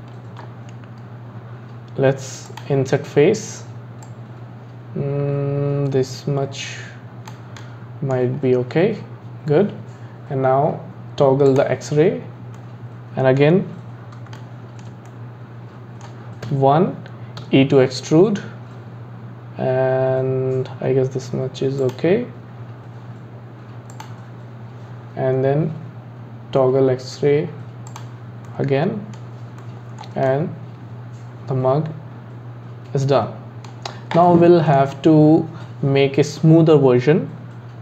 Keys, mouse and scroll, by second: 2.5-4.2 drag, 7.6 middle click, 8.4-9.5 scroll up 3, 11.5 click, 12.1 scroll down 2, 12.6-16.5 middle drag, 16.5 KP_1, 17.4 e, 23.9-27.1 drag, 27.9 click, 28.5-33.3 middle drag, 34.2-37.4 middle drag.